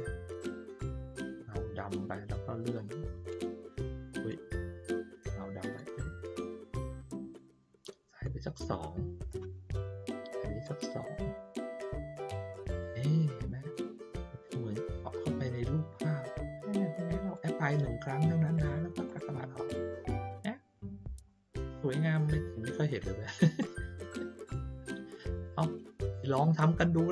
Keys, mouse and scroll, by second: 20.8 ctrl+middle click, 21.2 ctrl+middle click, 22.8 ctrl+middle click, 24.0 middle click, 25.3 click, 26.9 ctrl+middle click.